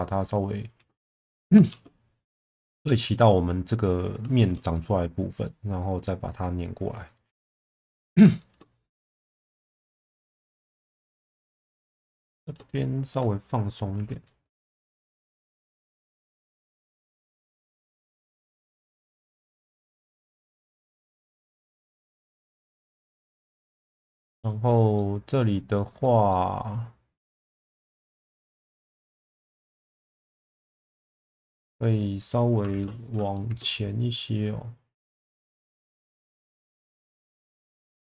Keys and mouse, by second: 1.2 ctrl+z, 1.7 shift+Tab, 4.4 shift+middle click, 5.3 click, 6.3 click, 7.1 click, 8.4 shift+middle click, 8.8 middle click, 9.8 middle click, 10.6 middle click, 12.4 shift+middle click, 13.9 shift+v, 15.5 click, 16.2 click, 16.4 shift+v, 18.0 shift+v, 20.3 Tab, 20.6 click, 21.0 shift+middle drag, 21.5 shift+middle click, 21.9-22.9 middle drag, 23.3 Tab, 24.0 middle click, 25.0 middle click, 25.7 middle click, 26.4-27.6 middle drag, 28.3 middle click, 29.2 click, 30.2 middle click, 31.7 click, 32.7 ctrl+z, 33.5 shift+v, 34.6 click, 35.2 2, 35.8 shift+v, 37.2 click.